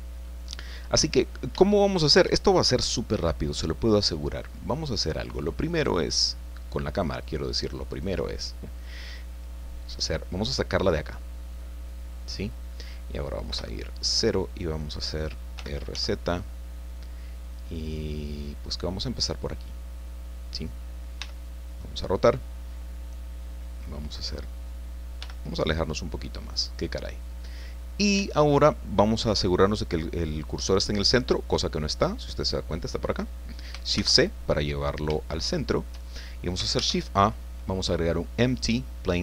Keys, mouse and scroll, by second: 0.5 scroll down 2, 1.1 middle click, 1.6 shift+middle click, 4.2 click, 5.1 middle click, 5.7 right click, 6.9 right click, 7.9 right click, 8.4 middle click, 11.0-12.7 drag, 13.5 KP_0, 15.5 r, 15.9 z, 19.1 click, 21.2 r, 24.2 click, 25.2 g, 25.4 middle click, 26.5 click, 27.2 middle click, 27.9-28.2 scroll down 1, 28.2 shift+middle click, 33.9 shift+c, 34.7-35.1 scroll up 2, 35.3 shift+middle click, 36.7 shift+a, 39.0 click.